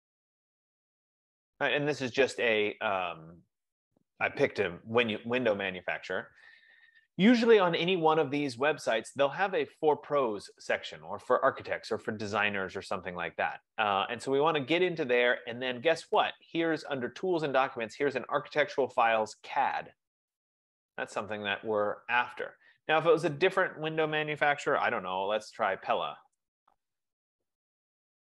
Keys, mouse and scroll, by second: 5.4 F15, 10.9-16.0 drag, 20.9-23.8 drag, 25.3-27.2 typing.